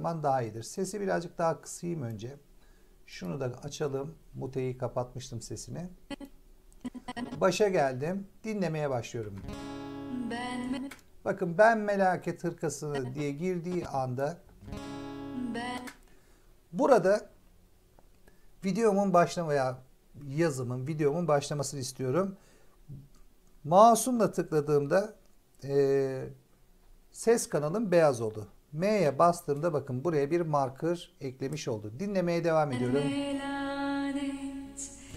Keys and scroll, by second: 9.1 space, 10.6 space, 14.3 space, 16.5 space, 28.9 m, 32.6 space.